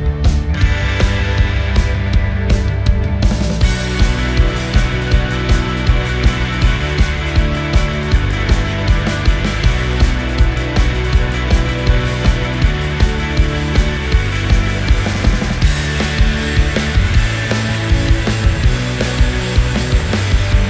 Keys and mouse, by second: 1.6 s, 3.0-4.3 drag, 4.4 s, 7.2 g, 10.0 s, 11.2 s, 12.6 g, 15.5 s, 16.7-18.0 middle drag, 18.8 g.